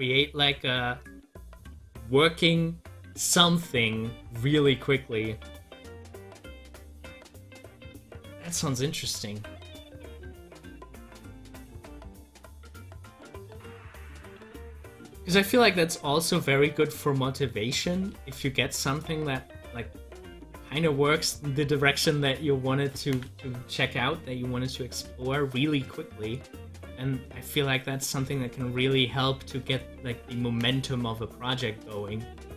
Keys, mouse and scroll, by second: 6.2 middle click, 6.2 click, 10.9 click, 12.2 ctrl+z, 18.2 ctrl+z, 23.0-29.7 drag.